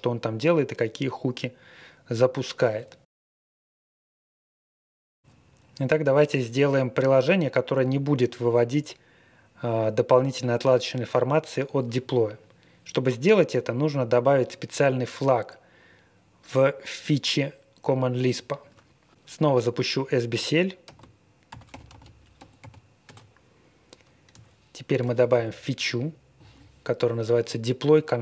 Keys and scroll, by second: 20.8 ctrl+r, 21.2-23.1 typing, 25.3 super+v.